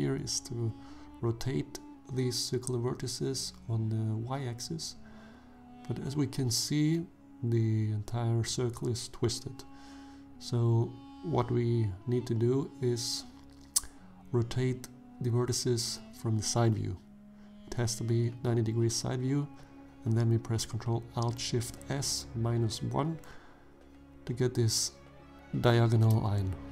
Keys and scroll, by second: 0.6 ctrl+alt+shift+s, 2.7 1, 3.8 Return, 4.8 shift+z, 12.5 ctrl+z, 15.0 1, 17.3 shift+z, 19.3 ctrl+alt+shift+s, 20.0 -, 21.3 1, 23.7 Return, 26.3 shift+z.